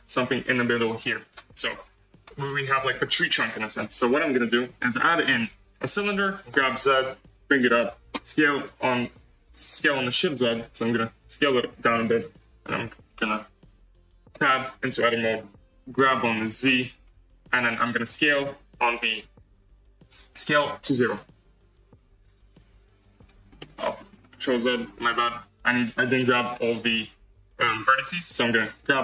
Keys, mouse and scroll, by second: 0.6-2.1 drag, 2.1 z, 2.4-5.7 middle drag, 6.5 g, 9.7 s, 14.3 Tab, 15.1 click, 15.9 g, 18.4 s, 23.5-24.6 middle drag, 24.6 ctrl+z, 25.0 ctrl+z, 26.5 alt+z, 27.4 click, 28.0 KP_1, 28.8 g.